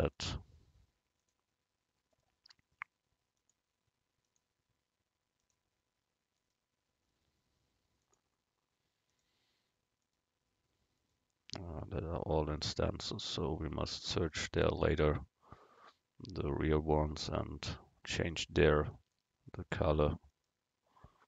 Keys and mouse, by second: 0.2-2.1 drag, 2.3-4.9 right drag, 3.4-6.2 drag, 6.5-10.0 right drag, 8.1-10.0 drag, 10.1-14.5 right drag, 12.6-14.5 drag, 15.9-19.0 right drag, 17.2-19.0 drag, 19.7-20.9 middle drag, 19.7-21.2 right drag.